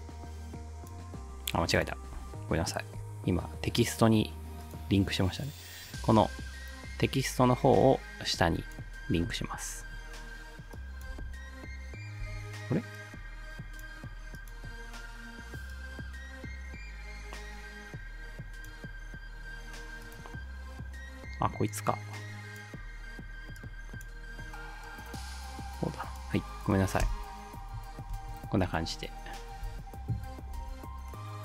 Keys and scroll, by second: 11.1 ctrl+alt+space, 12.2 space, 27.1 space, 28.2 space, 29.7 space.